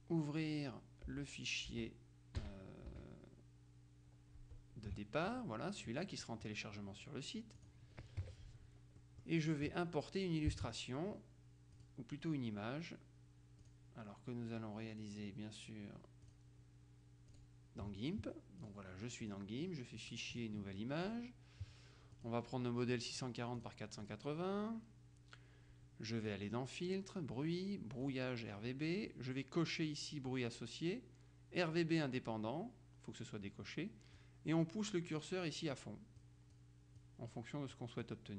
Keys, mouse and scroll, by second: 1.2 Down, 1.8 Up, 2.5 Left, 3.0 Right, 4.5 Tab, 7.7 click, 8.3 KP_Subtract, 9.1 click, 11.9 click, 13.7 click, 16.3 click, 17.4 click, 18.7 click, 20.4 click, 22.2 click, 23.0 click, 23.7-24.7 drag, 26.4 click, 28.1 click, 34.3-36.3 drag, 37.1 click.